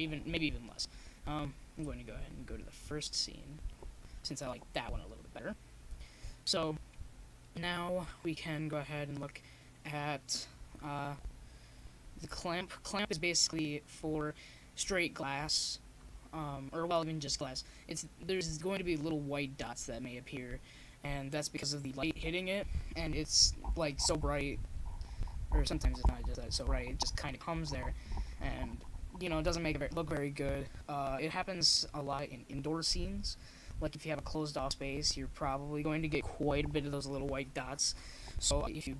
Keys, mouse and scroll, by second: 0.2-1.8 middle drag, 2.0 click, 4.5-23.7 middle drag, 26.2-28.0 drag, 28.0-32.3 middle drag, 29.1-30.2 scroll up 1, 30.2-31.2 scroll up 1, 32.3-37.1 drag, 37.6-38.9 drag.